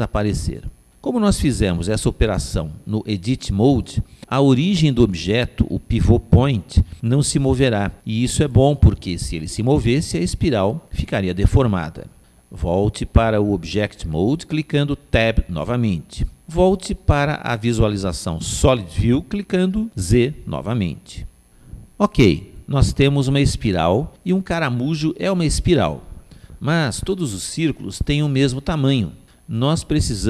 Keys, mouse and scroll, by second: 14.0 Tab, 17.6 z, 18.0-20.1 middle drag, 22.9-24.7 middle drag.